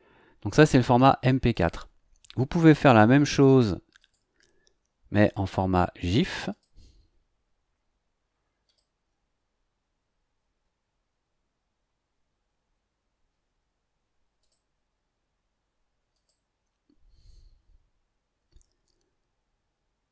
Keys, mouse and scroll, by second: 0.4 click, 1.5 click, 4.0 click, 5.4 click, 6.5 click, 8.6 click, 14.4 click, 16.1 click.